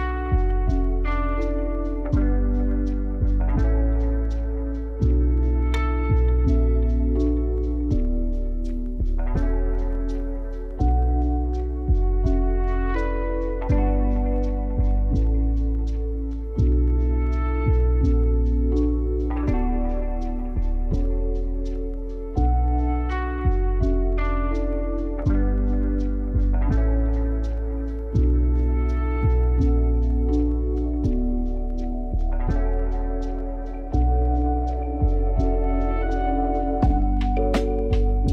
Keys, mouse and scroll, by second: 0.9 click, 2.5-3.8 scroll up 3, 4.0-4.9 scroll down 1, 5.4 click, 6.1 Tab, 6.7 click, 7.8 g, 12.4-12.8 scroll up 1, 12.8 click, 15.1 r, 18.6 r, 19.5 Tab, 19.8 click, 21.4 Tab, 22.7 a, 23.2-24.2 scroll up 1, 24.2 r, 28.8 Tab, 29.0 click, 29.7-31.6 scroll down 8, 32.2-34.1 drag, 35.2 s, 37.6 g.